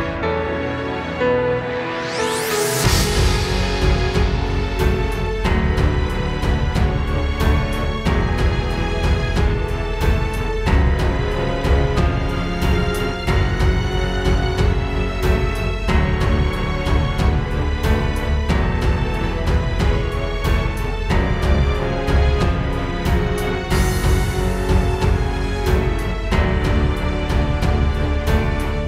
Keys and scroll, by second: 0.9 space, 1.9 space.